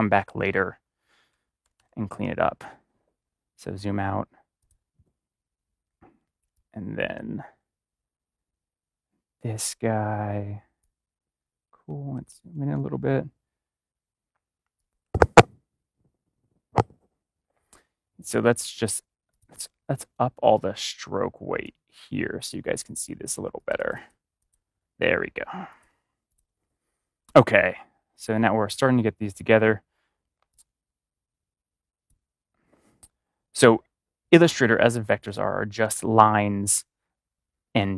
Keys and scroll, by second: 1.2 space, 12.1 ctrl+=, 35.2 space.